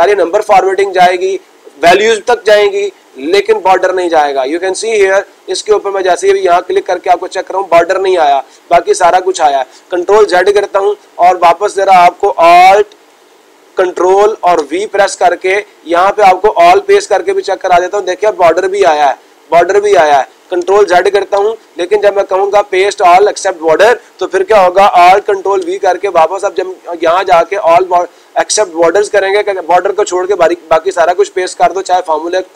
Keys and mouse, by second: 3.8-4.9 drag, 5.1-7.2 drag, 17.2-18.3 drag, 18.7-19.8 drag, 23.5-24.5 drag, 27.2-28.3 drag.